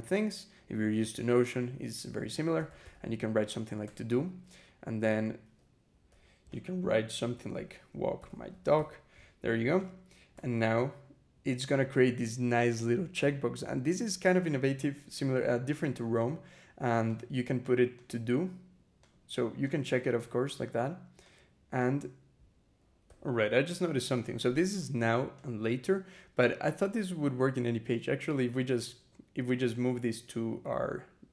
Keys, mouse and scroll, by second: 2.1-3.2 typing, 3.7 Return, 5.9-9.1 typing, 6.3 click, 9.6 click, 10.1 Return, 16.9 click, 17.8 click, 18.9 click, 19.5 click, 20.0 click, 21.1 click, 21.6 click, 22.9 e, 24.6 click, 25.2 click, 27.7 click, 28.4 click.